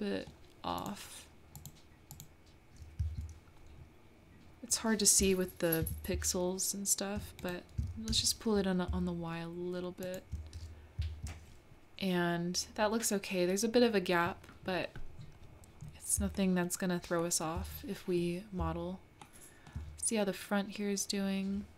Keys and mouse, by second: 0.8 click, 2.2 click, 3.0 middle click, 5.2 g, 8.0 g, 16.4 shift+middle click, 17.2 shift+middle click, 17.8 middle click, 19.2 shift+middle click.